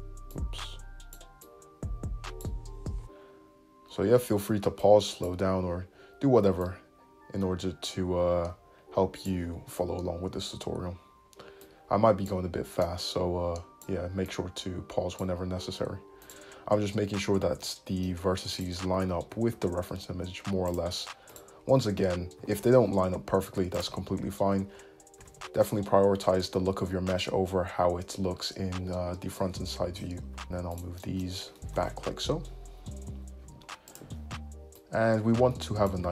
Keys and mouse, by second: 6.2-16.4 drag, 9.8 `, 16.4-18.6 middle drag, 18.6 click, 18.7-21.4 middle drag, 19.4 g, 21.4-25.2 drag, 22.5 g, 25.3 alt+z, 28.7 `, 30.2 alt+z, 30.4 alt+shift+middle click, 30.5 alt+z, 31.7 g.